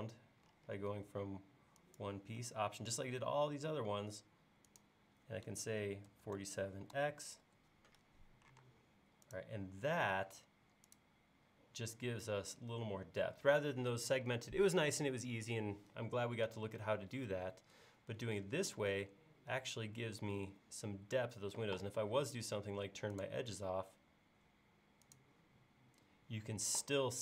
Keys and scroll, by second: 6.1 typing, 8.1-8.6 typing.